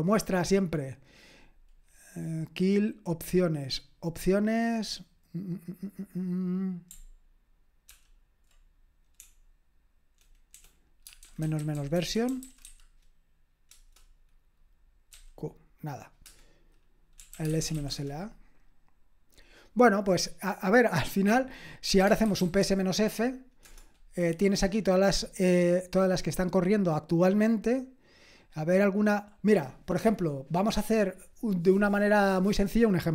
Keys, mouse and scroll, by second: 7.9 ctrl+p, 9.2-14.0 typing, 13.7 Return, 15.1 q, 16.2 Return, 16.9-18.2 typing, 21.7-23.1 typing, 23.6 Return, 29.1 scroll up 1, 29.3-33.1 scroll down 1.